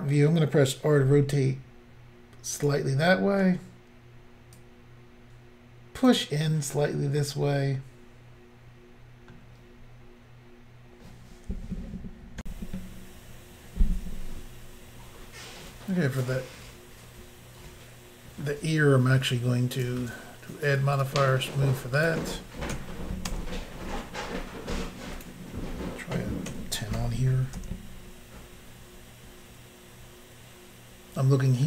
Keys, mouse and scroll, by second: 1.0 r, 2.6 click, 2.7 click, 4.6 click, 6.9 middle click, 12.4 Insert, 16.0 middle click, 19.8 click, 19.8 click, 21.0 click, 21.0 click, 22.0 click, 22.1 click, 22.7 1, 23.3 Return, 25.2 click, 26.5-27.0 typing, 27.6 Return.